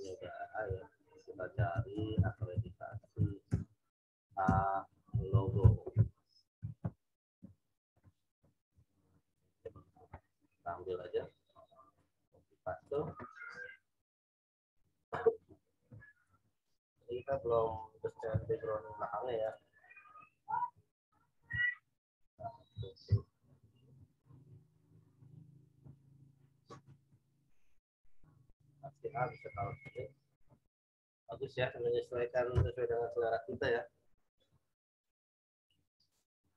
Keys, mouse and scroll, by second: 1.3 shift+a, 1.7 k, 3.4 space, 3.9 shift+a, 4.4 space, 5.1 l, 6.8 Return, 9.5 click, 11.9 right click, 12.8 click, 16.2 ctrl+v, 17.0 click, 18.2 w, 19.4 click, 21.4 m, 21.9 click, 22.3 v, 23.0 ctrl+r, 23.9 ctrl+r, 24.2 ctrl+t, 25.2 alt+shift+click, 27.0 Return, 27.4-29.4 drag, 29.4 z, 29.8 alt+click.